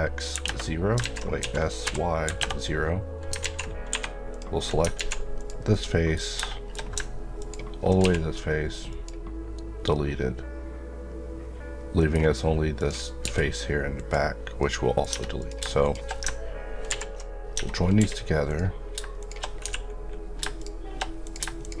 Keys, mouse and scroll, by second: 0.0-0.3 typing, 0.4 KP_Enter, 1.0 ctrl+z, 1.4 ctrl+s, 2.2 KP_0, 2.4 KP_Enter, 3.4 alt+z, 4.3 click, 5.0 alt+z, 5.4 click, 5.7 middle click, 7.4 ctrl+click, 8.0 x, 8.9 click, 12.2 scroll down 1, 12.8 click, 13.2 x, 14.0 click, 14.6 middle click, 15.1 Tab, 15.4 click, 16.9 ctrl+j, 17.5 Tab, 17.8 scroll up 1, 18.0 1, 18.5 click, 19.6 f, 20.6 shift+click, 21.6 shift+click.